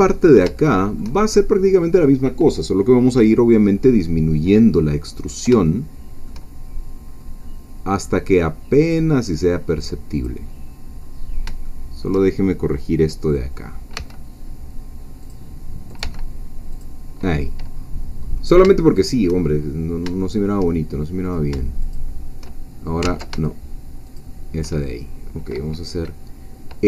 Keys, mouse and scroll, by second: 0.1-0.5 shift+scroll up 2, 0.6 shift+middle click, 4.5-5.4 scroll down 1, 5.4 scroll down 1, 5.7-6.8 shift+middle drag, 7.2 scroll up 1, 7.9-10.1 scroll down 1, 10.1 click, 11.0-11.3 scroll up 1, 11.7 shift+middle click, 13.9 g, 15.2 click, 16.0 g, 16.7 click, 17.7 scroll up 1, 18.3 scroll down 1, 18.8 shift+middle click, 19.5-20.0 shift+scroll up 1, 20.2 shift+middle click, 21.2 shift+click, 21.9 shift+click, 23.0 ctrl+z, 24.2 shift+click.